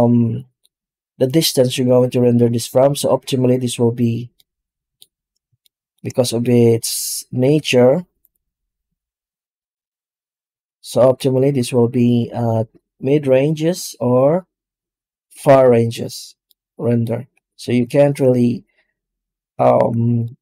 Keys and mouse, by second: 4.2-4.8 middle drag, 5.5-5.8 shift+middle drag, 6.1 middle click, 7.3 z, 16.3-16.9 middle drag, 17.8 shift+middle drag, 19.5 alt+middle click, 20.1-20.4 middle drag.